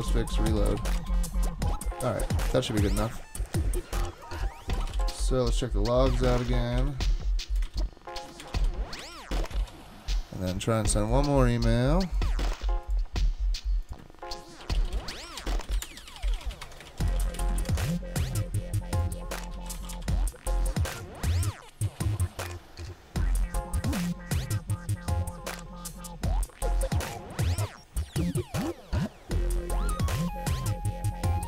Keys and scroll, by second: 0.0-1.3 typing, 4.5-5.4 typing, 6.1 ctrl+c, 6.8 ctrl+r, 7.7 ctrl+c, 8.2 ctrl+r, 8.2-9.0 typing, 9.6 super+k, 14.4-18.2 typing, 19.3-20.5 typing.